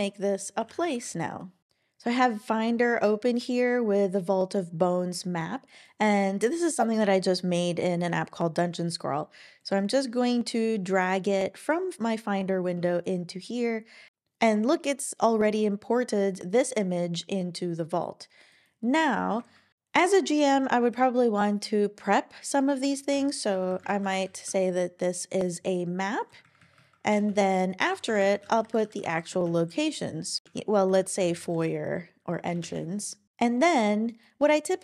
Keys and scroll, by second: 0.3-1.4 typing, 23.1 Return, 23.5-24.4 typing, 24.4 Return, 26.4 Down, 26.6 Down, 26.7 Down, 27.1 Return, 27.3 Return, 27.9 shift+3, 28.1 shift+3, 28.2 space, 29.6-32.0 typing, 32.4 Return, 32.6 Return.